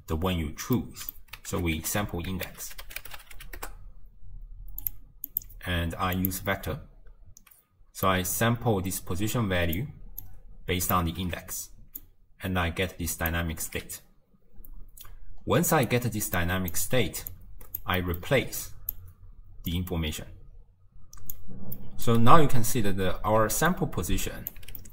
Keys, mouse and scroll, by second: 0.8-1.6 middle drag, 1.6 ctrl+a, 5.4-8.2 drag, 10.3 drag, 12.0 click, 13.9 d, 14.0-16.0 right drag, 16.0 d, 16.0 d, 16.4 click, 17.4 click, 18.0-18.7 middle drag, 18.7 click, 19.7 click, 21.8-22.8 middle drag, 22.8-23.5 scroll up 1, 23.5 d, 23.8 click, 24.6 d, 24.8-24.9 middle drag.